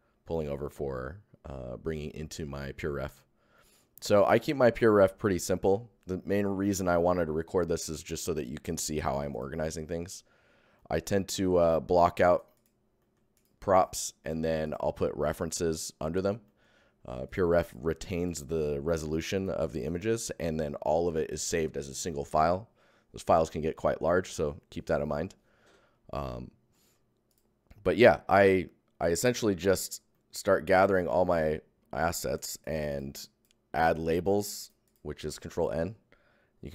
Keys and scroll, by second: 14.6 Tab, 16.1 Tab, 17.2 Tab, 26.3 Tab, 30.1 Tab, 35.2 ctrl+Tab, 35.6 ctrl+n.